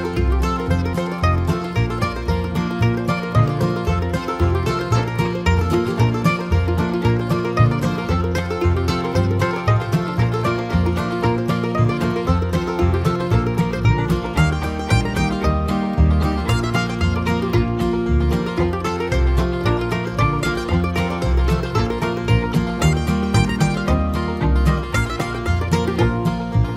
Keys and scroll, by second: 13.1 Return.